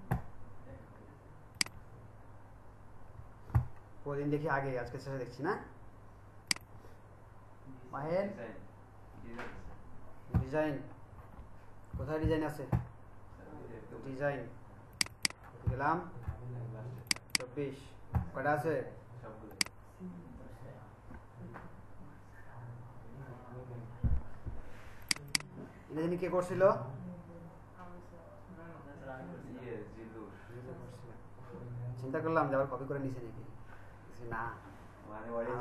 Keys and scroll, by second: 34.3 Right.